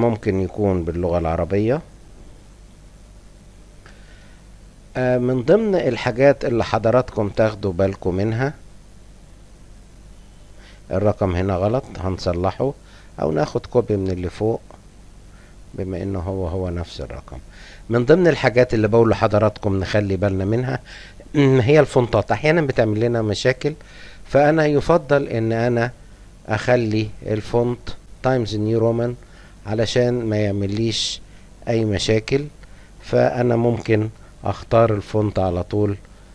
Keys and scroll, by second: 0.0-2.5 typing, 34.7-36.0 typing.